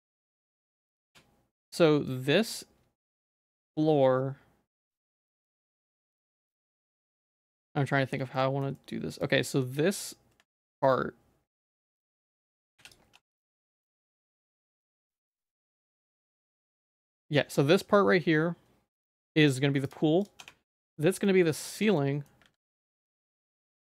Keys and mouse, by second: 0.3 middle click, 1.1 Tab, 1.1 click, 1.9 middle click, 6.5 z, 6.8 middle click, 8.4 middle click, 8.8 shift+middle click, 9.4 shift+click, 10.6-11.6 ctrl+drag, 12.1 shift+middle click, 12.8 p, 13.1 Tab, 13.4 z, 13.8 shift+middle click, 14.4 middle click, 15.5 g, 20.4 Tab, 20.7 Tab, 21.0 Tab, 21.2 middle click, 21.8 Tab, 22.0 middle click, 22.5 ctrl+s, 23.6 middle click.